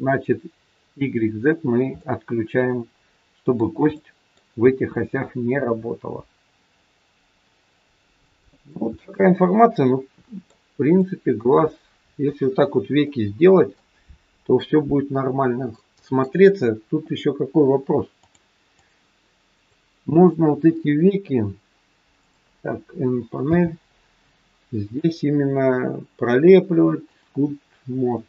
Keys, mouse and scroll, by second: 1.5-1.9 scroll down 2, 1.9 middle click, 4.0 middle click, 4.5 r, 8.9 middle click, 10.9 shift+middle click, 11.5 middle click, 11.5-12.0 scroll up 1, 12.9 middle click, 18.2 middle click, 18.2 click, 19.5 click, 23.4 click, 23.4 n, 25.0 click.